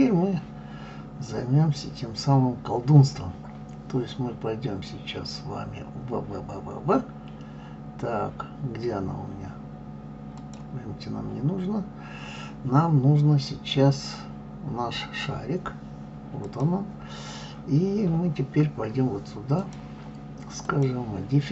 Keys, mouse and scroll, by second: 10.3 click, 16.4 click, 19.5 click, 20.6-21.5 drag.